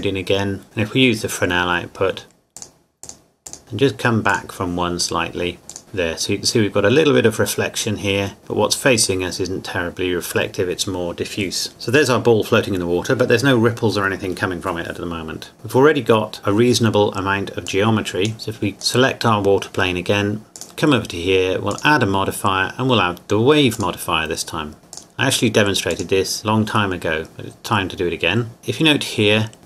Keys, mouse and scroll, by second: 0.4 scroll up 1, 0.6 click, 1.7-2.6 scroll up 1, 2.6 click, 5.7 click, 6.2 scroll up 1, 11.7-12.8 scroll down 1, 15.5 click, 17.7 click, 18.8 right click, 20.6 click.